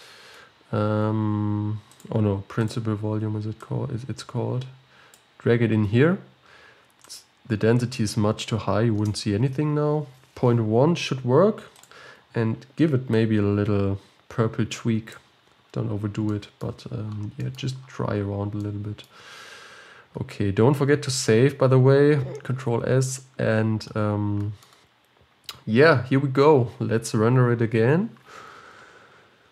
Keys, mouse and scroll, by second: 5.5-13.3 drag, 23.5-29.5 middle drag.